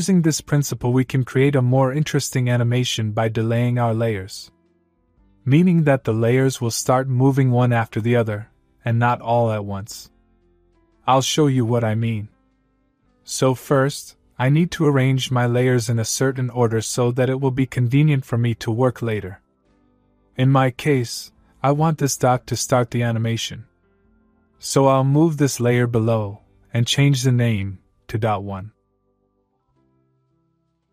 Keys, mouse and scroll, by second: 3.3 click, 15.4 click, 21.6 click, 26.1-26.9 click, 29.3 Return, 29.7 Right.